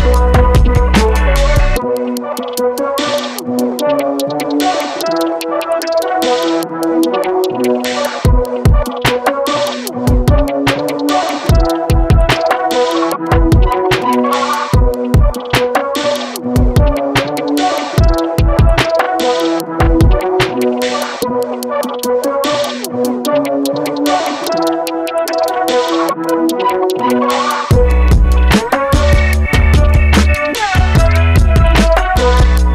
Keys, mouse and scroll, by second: 8.2 click, 9.2-19.4 middle drag, 19.4 click, 20.7 KP_3, 21.2-22.4 scroll up 1, 22.4-26.1 drag, 26.7-30.4 middle drag, 30.7 KP_3, 31.5-31.9 scroll down 4, 31.9-32.7 middle drag.